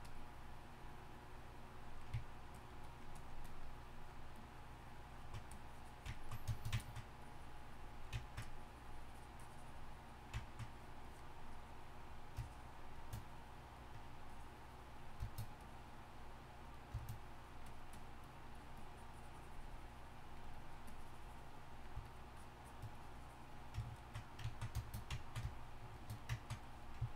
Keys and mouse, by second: 0.0-2.2 ctrl+drag, 2.5-15.2 ctrl+drag, 15.2-23.8 middle drag, 26.4-27.1 drag.